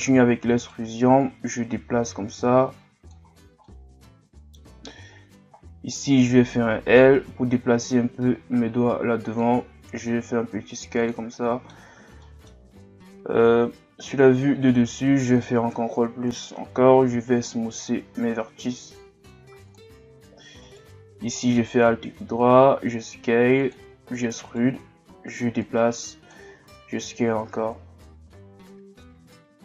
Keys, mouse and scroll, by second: 0.2 e, 1.2-3.3 drag, 3.3-3.7 scroll down 3, 3.7-5.0 middle drag, 5.0-5.5 scroll up 2, 5.9 right click, 7.8-9.9 drag, 9.9 s, 11.3-12.8 middle drag, 12.8-13.2 scroll down 1, 13.2-13.8 scroll up 2, 14.2 alt+right click, 15.7 ctrl+KP_Add, 16.3 ctrl+KP_Add, 17.1 w, 20.6 alt+right click, 21.3-21.7 scroll down 1, 21.7-22.3 scroll up 2, 22.3 s, 25.6-26.6 drag, 26.6 s.